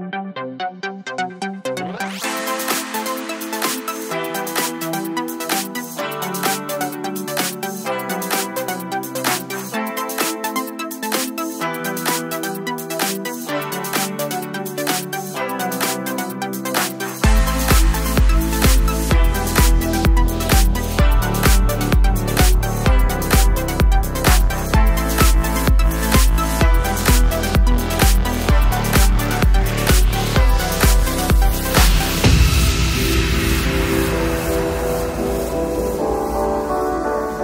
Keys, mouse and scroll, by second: 0.8-3.2 alt+shift+drag, 5.1 click, 8.9-9.4 drag, 11.2 right click, 11.8-20.2 drag, 22.2 click, 24.7-27.1 alt+shift+drag, 27.1 click, 30.5 click, 32.2 shift+click, 32.7 Return, 35.4 click.